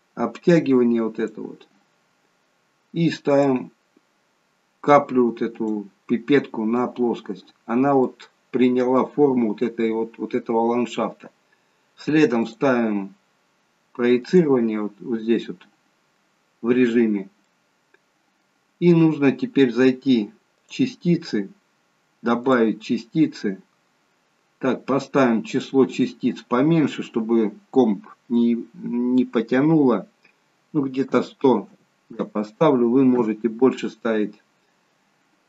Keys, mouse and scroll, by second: 3.4 click, 7.2-8.0 scroll up 2, 8.0 middle click, 8.0 scroll up 1, 10.0 scroll down 1, 12.4 click, 17.4 middle click, 18.8-20.4 scroll down 2, 20.6 click, 22.4 click, 25.5 click.